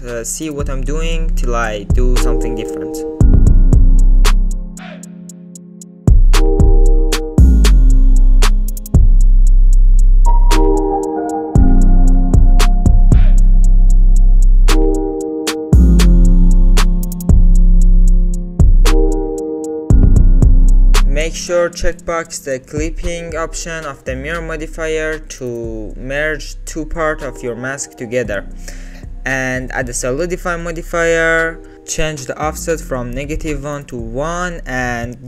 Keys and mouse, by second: 3.7 e, 6.3 e, 8.1 middle click, 8.7 alt+z, 8.9 middle click, 9.4 s, 10.5 s, 11.5 alt+z, 11.9 middle click, 12.1 alt+middle click, 12.2 alt+click, 12.4 s, 13.3 g, 13.7 click, 13.9 alt+z, 14.1 click, 14.4 alt+z, 14.6 alt+click, 14.7 alt+click, 15.7 e, 17.2 s, 18.9 g, 19.9 shift+middle click, 23.1 click, 24.8 e, 28.8 g, 29.2 middle click, 29.6 Tab, 30.0-31.1 drag, 32.5 click, 34.0 shift+click.